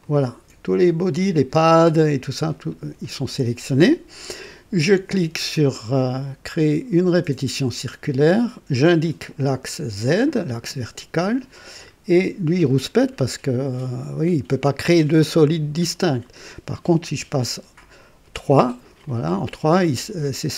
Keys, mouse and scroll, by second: 0.0 ctrl+click, 6.9 click, 8.6 click, 9.9 click, 12.1 click, 17.1 KP_3, 19.0-20.3 drag.